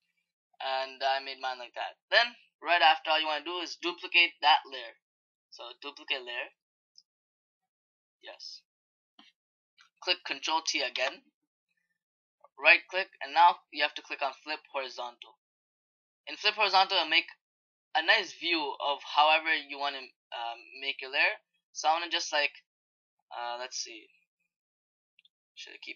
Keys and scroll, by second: 10.7 ctrl+t.